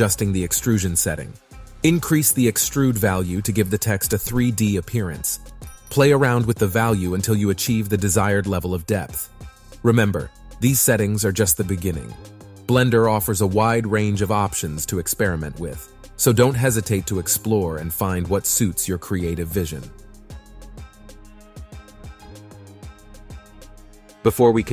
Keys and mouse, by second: 2.7-3.9 drag, 4.1-7.4 middle drag, 7.8 click, 8.3 click, 11.6-13.2 drag, 13.4 click, 14.0 middle click, 15.7 middle click, 16.7 KP_Enter, 17.6 KP_3, 21.0-22.4 drag, 23.2-24.4 drag.